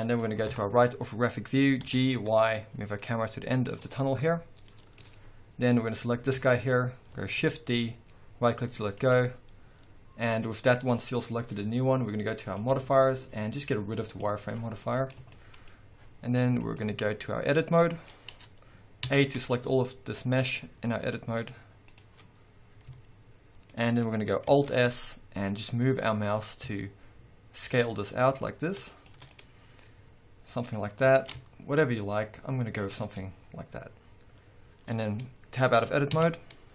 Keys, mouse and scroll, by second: 0.5 KP_3, 1.2-1.9 scroll down 2, 1.9 g, 3.7 click, 3.8 scroll down 2, 4.0-5.6 middle drag, 4.8 scroll up 1, 5.6 click, 6.0-8.7 middle drag, 6.8-7.4 scroll up 1, 7.4 shift+d, 9.2 right click, 12.6 click, 14.2 click, 14.8-16.6 middle drag, 16.6-19.4 drag, 19.1 Tab, 19.4-20.1 scroll down 1, 20.1-20.5 scroll up 1, 21.4 click, 23.0 a, 23.4 click, 23.8-29.1 middle drag, 24.7 alt+s, 29.1 shift+click, 29.4-32.8 middle drag, 31.2 alt+s, 32.8 shift+click, 33.1-36.7 middle drag, 36.2 Tab, 36.5-36.7 scroll down 1.